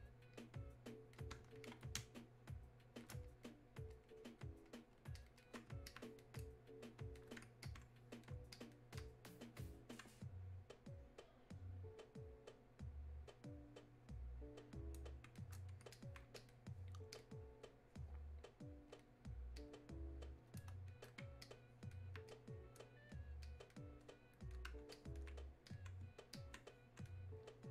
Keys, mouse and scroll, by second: 2.0 space, 2.5 click, 2.6 space, 3.3-27.7 drag.